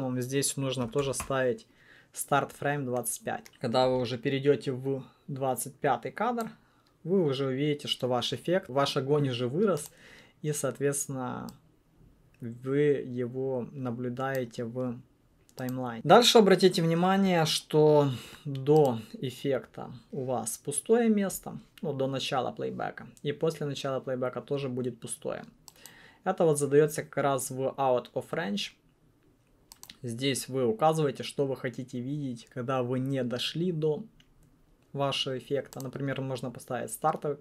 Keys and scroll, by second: 3.4 Return.